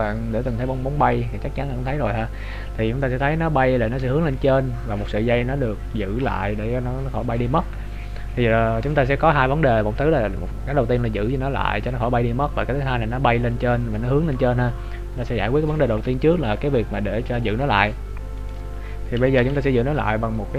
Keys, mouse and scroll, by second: 14.9 scroll up 1, 18.4 right click, 18.4-19.2 scroll up 11, 19.4 KP_Decimal, 20.2-20.5 scroll down 5.